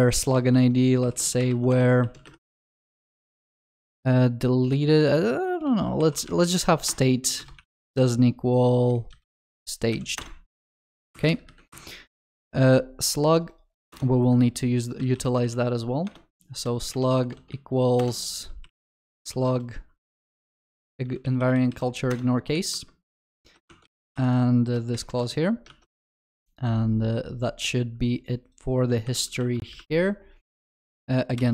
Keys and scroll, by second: 1.7 Return, 7.0 Return, 10.8 ctrl+s, 16.1 Return, 23.4 ctrl+alt+shift+l, 25.7 ctrl+alt+shift+l, 26.0 ctrl+s, 29.1 ctrl+y.